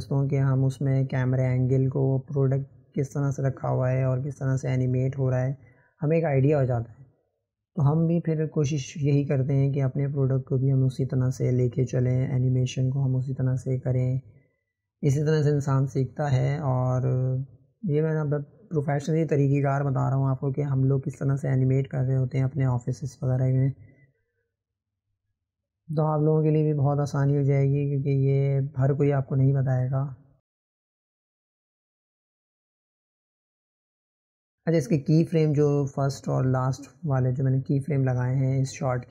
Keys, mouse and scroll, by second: 1.3-3.8 drag, 5.7-9.0 drag, 9.9 click, 11.5 click, 12.2 click, 12.5 Delete, 13.7 click, 15.6 click, 16.3 click, 17.6-18.6 drag, 20.7-21.4 drag, 23.1 click, 24.4-26.5 drag, 30.1 click, 30.8 ctrl+z, 33.4-36.8 drag.